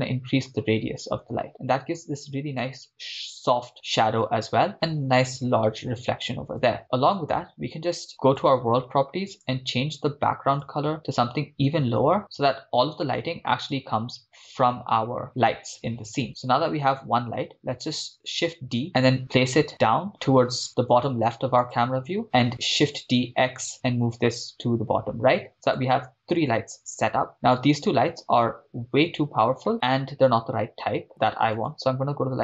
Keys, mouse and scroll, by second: 8.4 click, 9.3 click, 18.2 shift+d, 21.6-22.1 drag, 23.0 shift+d, 23.2 x, 25.6 click, 27.8 click, 27.8 right click, 31.6 click.